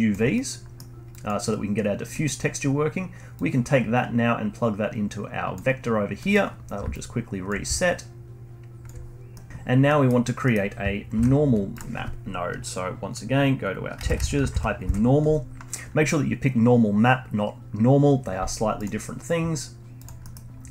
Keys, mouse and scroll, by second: 0.3-1.1 middle drag, 1.1 click, 2.1-3.3 middle drag, 3.3 click, 6.1 middle click, 6.9-9.3 alt+drag, 9.3 middle click, 9.8-11.1 middle drag, 11.1 shift+a, 20.2 middle click, 20.4-20.7 scroll up 1.